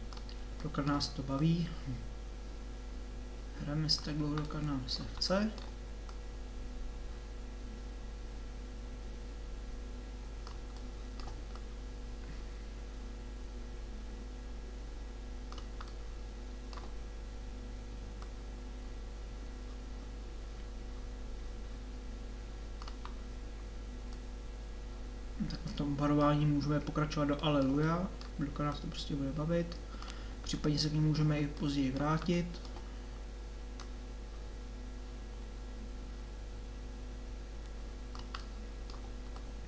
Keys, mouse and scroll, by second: 0.6 middle click, 1.4-3.7 drag, 3.7 middle click, 6.1 click, 7.0-8.9 drag, 8.9-11.6 middle drag, 11.6 click, 13.1 click, 16.1 middle click, 18.2-19.2 drag, 23.2-24.2 middle drag, 26.4-28.7 middle drag, 30.6-32.2 middle drag, 32.7 middle click, 34.4-37.1 drag, 38.4 middle click.